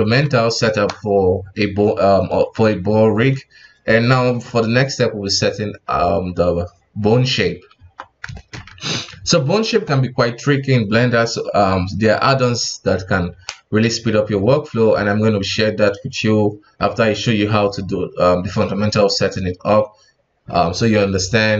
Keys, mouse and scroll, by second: 7.7 KP_1, 8.3-8.7 shift+middle drag, 8.7 ctrl+Tab, 9.1 alt+a.